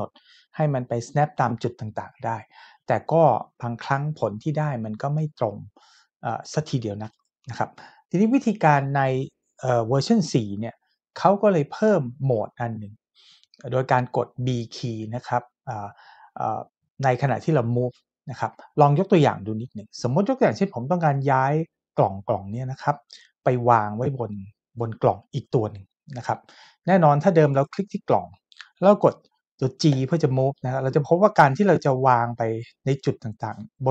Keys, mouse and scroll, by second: 27.5 click, 29.9 g.